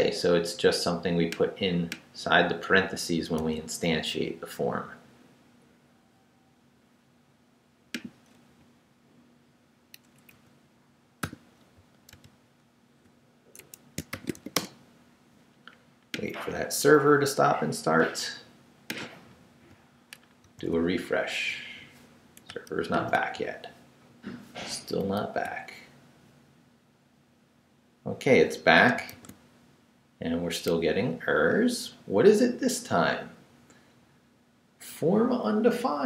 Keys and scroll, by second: 8.6 Right, 10.4 Right, 11.2 i, 11.7 super+i, 12.1 super+v, 13.6 super+Escape, 13.9-14.8 typing, 20.4 super+r, 22.9 super+r, 25.2 super+r, 29.1 super+r.